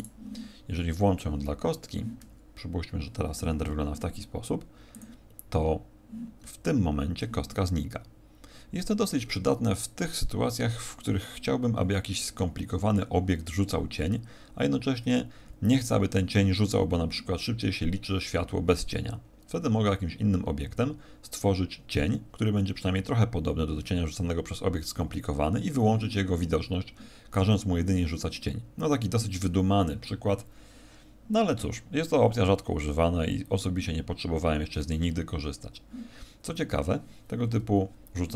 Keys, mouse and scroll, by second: 0.0 right click.